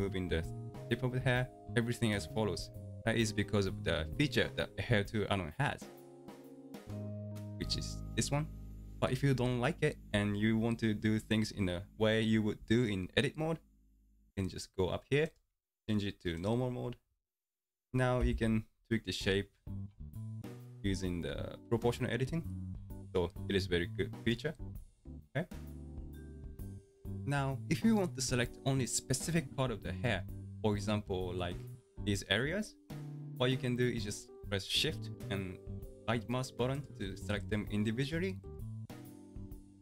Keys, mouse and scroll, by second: 15.3-18.2 drag, 18.2 g, 25.7-27.2 drag, 30.3-32.0 middle drag, 32.0-33.1 scroll up 2, 33.1-33.8 shift+middle drag, 33.8-34.4 scroll up 2, 34.4-36.9 middle drag, 36.9 shift+right click, 37.4 shift+right click, 38.0 shift+right click, 38.4 shift+right click, 39.1-39.8 shift+right drag.